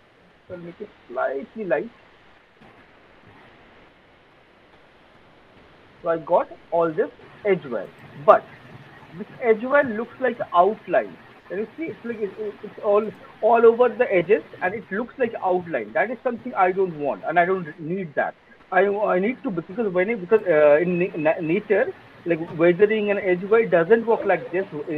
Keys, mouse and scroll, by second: 1.5 click, 2.2 alt+right click, 2.7 alt+middle click, 3.0 alt+click, 3.4 alt+right click, 3.8 alt+middle click, 5.9 alt+click, 6.7 click, 7.1 click, 7.8 click, 7.9 click, 8.9 alt+right click, 9.4 alt+middle click, 10.2 alt+right click, 10.7 alt+middle click, 10.8 alt+click, 11.3 alt+middle click, 11.6 alt+click, 12.1 alt+middle click, 17.4 alt+middle click, 18.0 alt+right click, 18.6 alt+middle click, 18.8 alt+right click.